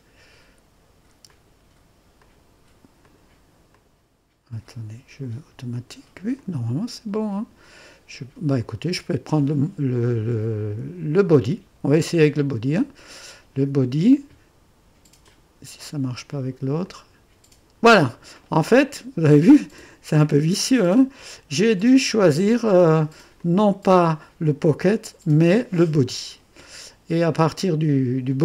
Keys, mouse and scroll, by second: 1.3 click, 2.2 click, 3.0 click, 3.7 click, 5.7 click, 6.4 click, 8.6 click, 12.6 click, 15.2 click, 15.8 click, 16.9 click, 21.8 click, 23.4 click.